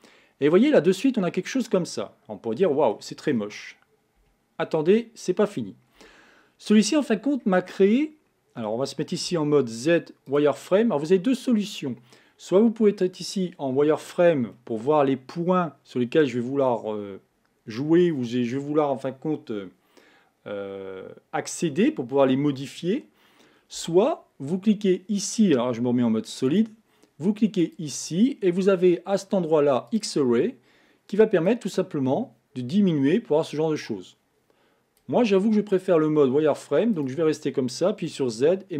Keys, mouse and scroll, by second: 0.5-3.5 middle drag, 4.2 KP_1, 6.0 Tab, 6.5-7.2 scroll up 3, 7.2-8.0 scroll down 1, 8.0-9.3 shift+middle drag, 9.3 z, 13.0-14.5 scroll down 2, 14.5-17.5 shift+middle drag, 23.8 Tab, 25.8 z, 27.6-30.6 drag, 38.1 z.